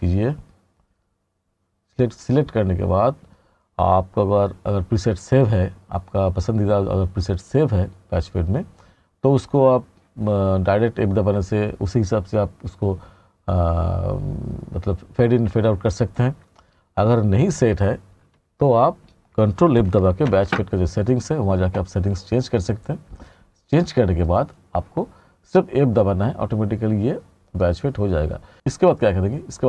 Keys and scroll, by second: 20.3 ctrl+f.